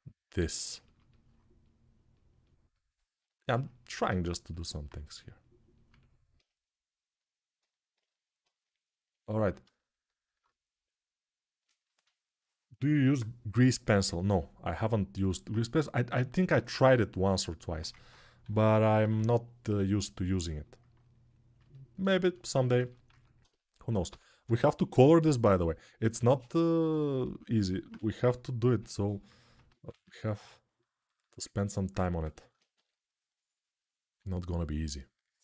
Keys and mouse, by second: 18.2 g, 18.6 ], 18.7 ], 20.1-22.4 shift+drag, 22.9 alt+q, 23.4 alt+click, 23.8 g, 24.2 ], 24.3 ], 24.5 ], 25.4-27.3 ctrl+alt+drag, 27.3-30.9 ctrl+alt+right drag, 27.7 1, 29.5 alt+q, 30.9-35.4 ctrl+alt+drag.